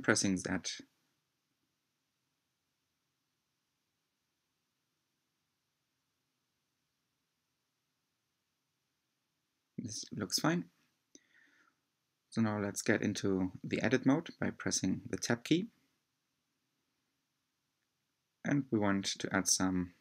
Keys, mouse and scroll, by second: 4.4 click, 6.0-6.7 scroll down 1, 8.2-12.6 middle drag, 14.0-14.8 scroll up 4, 15.5 Tab, 16.8-17.3 scroll up 1, 17.3-20.0 middle drag.